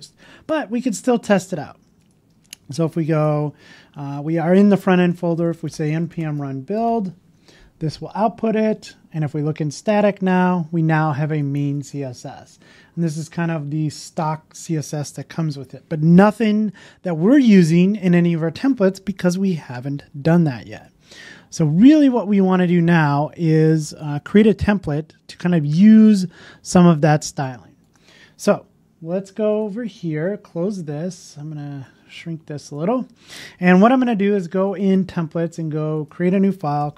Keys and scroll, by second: 15.4 super+w, 30.1 super+w.